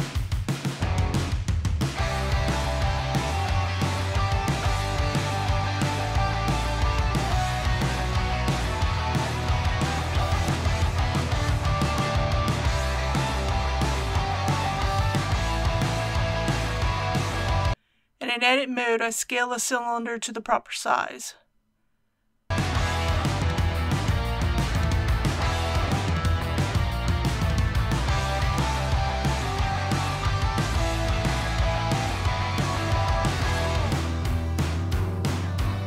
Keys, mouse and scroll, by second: 1.2 s, 3.5 click, 4.0-4.7 typing, 7.5 click, 8.4 middle click, 9.5 KP_3, 16.5 alt+a, 17.5 click, 17.9 Tab, 19.5 click, 20.1-21.0 typing, 21.2 Return, 23.7 middle click, 24.0 scroll down 1, 24.5-26.5 typing, 24.6 click, 24.7 right click, 25.3 click, 25.4 right click, 26.2 click, 27.7 click, 27.8 s, 28.4 e, 28.5 x, 28.8 click, 30.4 i, 30.7 middle click, 30.8 scroll up 1, 31.1 scroll down 1, 31.3-31.9 scroll up 1, 32.3 s, 32.5 shift+x, 33.1 click, 33.3 middle click, 33.7 KP_1, 35.6 Tab, 35.7 click.